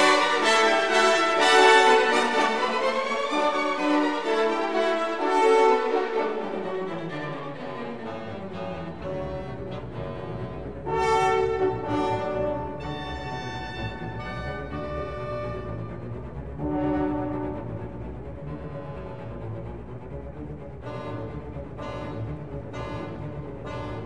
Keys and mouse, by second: 0.4 KP_Enter, 1.1 3, 1.5 click, 2.1 shift+drag, 3.6 i, 4.9 i, 5.5 click, 6.6-8.5 drag, 9.1 e, 11.3 click, 12.7-14.8 drag, 15.7 i, 16.5 click, 17.5-19.7 drag, 20.2 e, 20.7 click, 21.7-23.2 drag, 23.9 click.